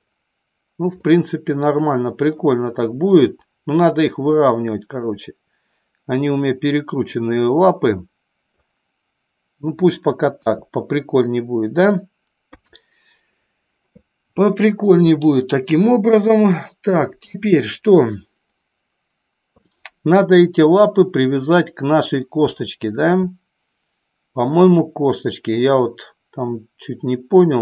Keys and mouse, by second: 0.9-2.4 middle drag, 4.4-8.5 middle drag, 10.2 KP_1, 12.4 KP_3, 22.5-23.0 shift+middle drag.